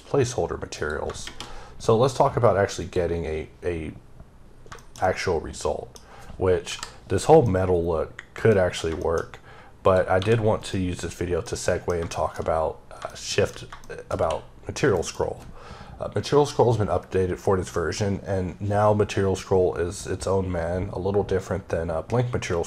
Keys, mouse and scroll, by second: 0.6 click, 2.7 click, 3.8-4.5 scroll up 2, 4.6 middle click, 4.9 double middle click, 6.5 KP_5, 7.3 middle click, 8.8 shift+middle click, 9.7 click, 10.0 g, 10.5 right click, 11.0 scroll down 2, 11.3 middle click, 12.9 shift+double middle click, 13.7 middle click, 14.8 alt+m.